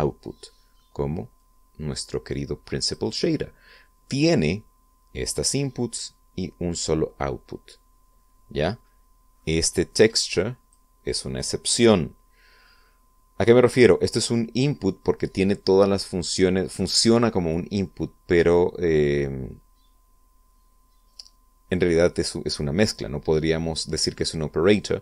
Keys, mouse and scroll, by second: 2.1-3.9 drag, 10.9-11.6 drag.